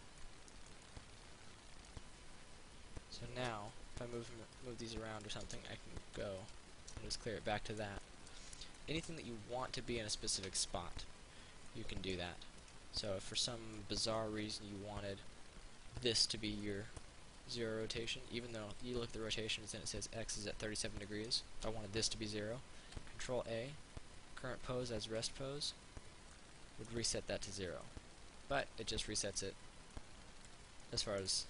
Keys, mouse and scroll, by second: 4.9 click, 6.3 alt+g, 6.6 click, 7.2 middle click, 12.0 alt+middle click, 12.8 right click, 13.3 middle click, 14.6-16.8 drag, 16.8 middle click, 23.0 ctrl+a, 25.3 click, 26.6-28.0 middle drag.